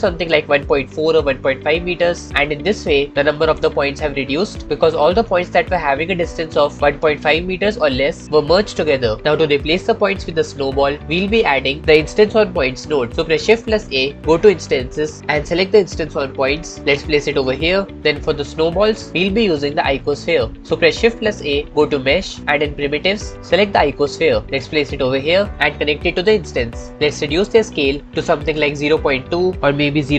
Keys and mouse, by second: 10.3 middle click, 11.0 middle click, 14.0 shift+a, 21.5 shift+a, 25.5-26.7 drag, 27.6-29.2 drag, 29.6 click.